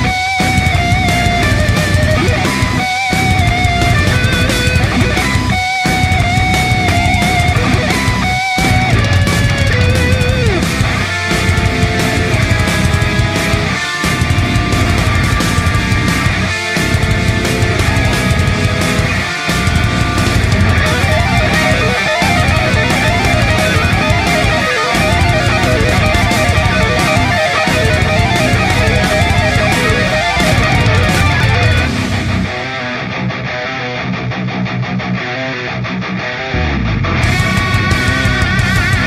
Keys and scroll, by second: 6.2 space, 22.0 space, 31.9 ctrl+e, 35.7 space, 38.9 ctrl+shift+F12.